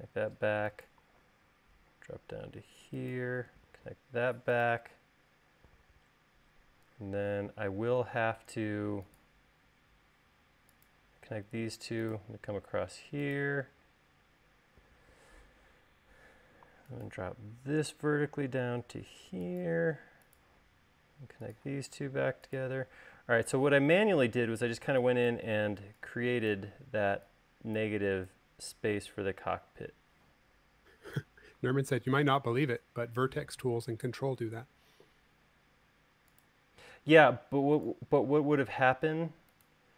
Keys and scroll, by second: 2.5 Up, 24.0 space, 31.4 Escape, 35.8 l, 39.3 l.